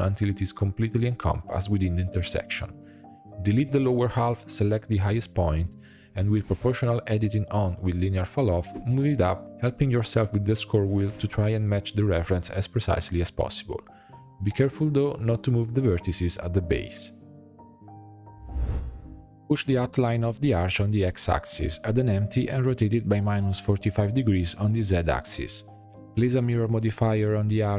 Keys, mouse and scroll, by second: 0.3 s, 2.9 click, 5.0 x, 6.1-8.5 drag, 8.5-9.3 scroll up 1, 9.3 shift+middle click, 9.9 g, 19.0 g, 19.8 Tab, 20.1 scroll down 1, 20.3 shift+a, 21.8 r, 23.8-26.5 drag.